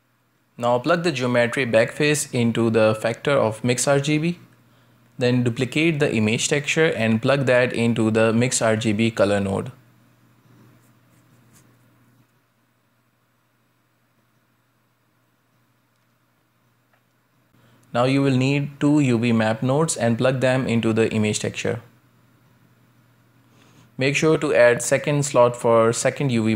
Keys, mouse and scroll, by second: 0.4-1.6 scroll up 2, 1.6-3.0 scroll up 1, 3.0 click, 4.7 click, 6.3-7.8 drag, 7.8-10.1 middle drag, 10.1 scroll down 3, 10.3 middle click, 10.8-11.2 scroll down 2, 11.2 click, 11.9 g, 12.9 shift+d, 15.0-16.2 drag, 16.4-17.9 drag, 17.9-18.4 middle drag, 18.4 scroll down 1, 18.7 click, 19.2-20.0 middle drag, 20.0 shift+a, 24.4 shift+d, 25.3 scroll up 2, 26.1-26.5 drag.